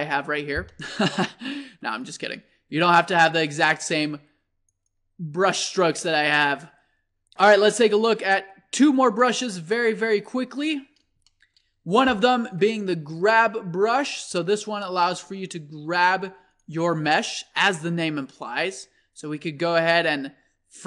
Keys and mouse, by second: 1.5-6.4 middle drag, 7.1-7.8 middle drag, 9.2-12.8 middle drag, 14.3 click, 14.5-15.0 middle drag, 16.1 f, 17.5-19.5 drag.